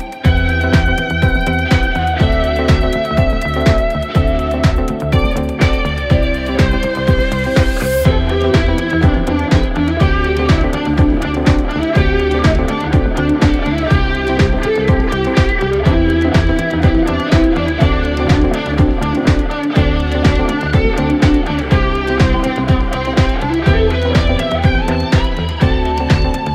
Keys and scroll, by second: 5.5 4, 8.6 ], 13.4 ], 15.2 ], 17.6 4, 25.9 3.